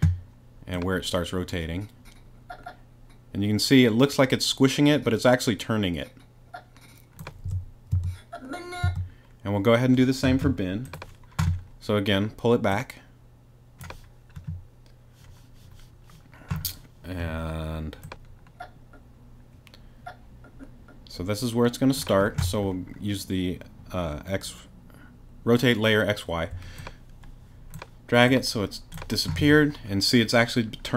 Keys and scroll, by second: 7.9 super+space, 8.6 space.